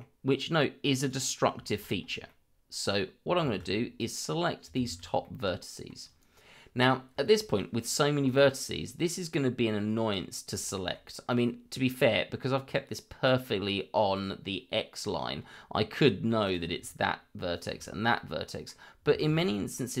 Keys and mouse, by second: 1.0 click, 1.6 shift+middle drag, 2.2-2.9 middle drag, 3.4 shift+z, 4.0-4.6 drag, 5.2 middle click, 8.3 click, 10.7 shift+middle click, 16.4 click, 17.5 shift+click, 18.1 middle click, 19.2 shift+z, 19.5 middle click.